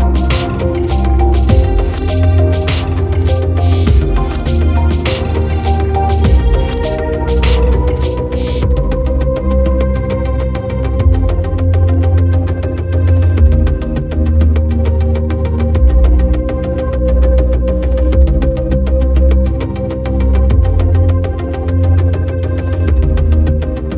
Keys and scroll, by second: 0.4 ctrl+t, 8.8 ctrl+z, 10.9 ctrl+=, 13.4 ctrl+0.